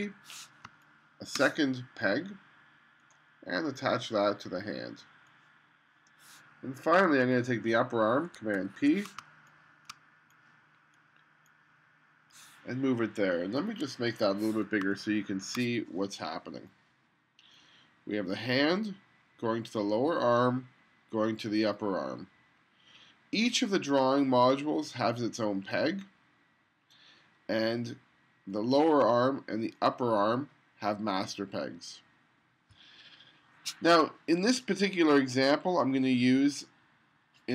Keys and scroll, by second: 0.7 space, 8.6 super+p, 9.3 space, 14.9 space.